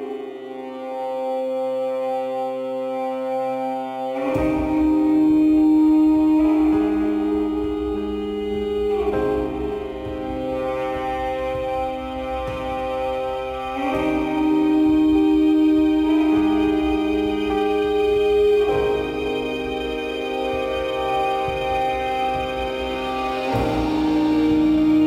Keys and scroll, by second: 3.3 shift+e, 8.9 ctrl+t.